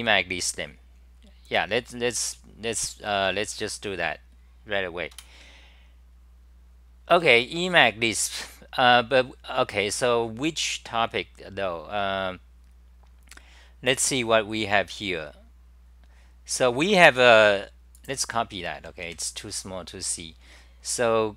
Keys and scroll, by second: 5.2 super+w, 7.2-8.4 c.